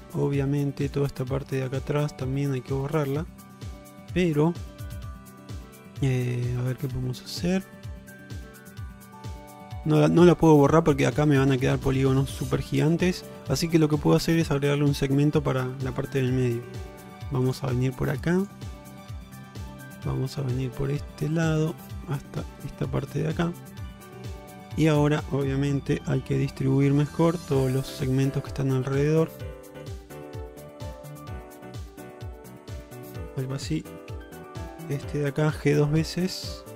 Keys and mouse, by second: 0.9 ctrl+alt+click, 1.8 alt+click, 2.4-10.8 middle drag, 12.0-13.3 middle drag, 14.2 middle click, 16.4 k, 23.3 middle click, 24.0 shift+middle click, 26.1 g, 27.8 click, 28.1 g, 29.8 click, 30.0 g, 31.8 click, 32.1 g, 34.2 1, 35.5 g.